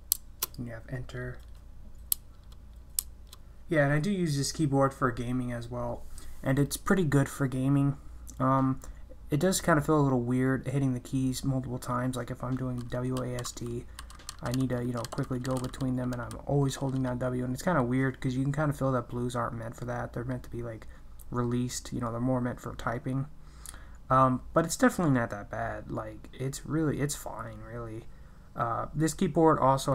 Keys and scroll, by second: 0.1 BackSpace, 2.1 Return, 3.0 Return.